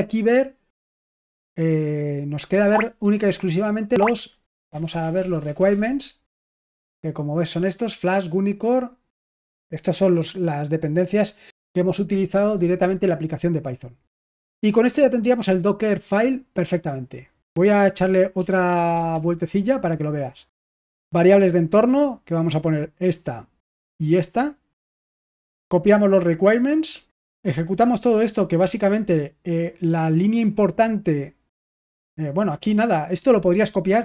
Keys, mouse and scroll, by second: 4.4-6.3 typing, 18.0 ctrl+p, 18.3 ctrl+p, 18.9 Return, 22.3 click, 22.6 click, 24.1 click, 24.3 click, 25.8 click, 26.1 click, 26.9 click, 27.8-28.8 drag.